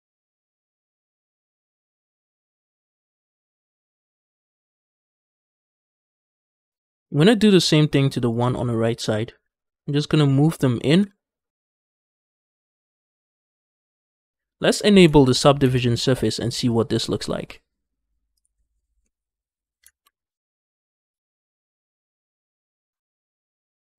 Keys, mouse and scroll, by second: 0.0-1.3 typing, 0.2 click, 0.4 shift+click, 0.5 shift+middle click, 0.6 click, 0.9 shift+click, 0.9 shift+middle click, 1.0 scroll up 1, 1.1 click, 1.3 middle click, 1.4 shift+middle click, 1.5 shift+middle click, 1.8 scroll up 1, 1.9 middle click, 2.1 click, 2.2 middle click, 2.7-4.6 typing, 2.7 shift+click, 3.0 shift+click, 3.2 click, 3.8 shift+click, 4.3 middle click, 4.4 scroll down 3, 4.4 Tab, 4.8 Tab, 4.9 shift+middle click, 5.0 scroll up 3, 5.3 scroll down 3, 5.4 middle click, 6.1 shift+middle click, 6.2 middle click, 6.4 click, 6.5 middle click, 6.6 g, 6.7 x, 8.2 shift+click, 8.5 shift+middle click, 9.3-13.4 typing, 9.7 right click, 10.7 right click, 11.6 click, 12.0 shift+click, 12.1 shift+middle click, 12.1 scroll down 2, 12.2 middle click, 12.3 shift+middle click, 12.4 scroll up 1, 12.5 click, 12.8 shift+click, 12.8 middle click, 13.2 shift+middle click, 13.4 Tab, 13.4 middle click, 13.4-13.9 scroll down 2, 13.9 shift+middle click, 15.5 ctrl+space, 18.2 click, 18.9 middle click, 19.9 ctrl+space, 20.1 middle click, 21.1 shift+middle click, 21.4 scroll up 1, 21.6-22.8 middle drag, 22.8 Tab, 23.1 middle click, 23.8 shift+middle click.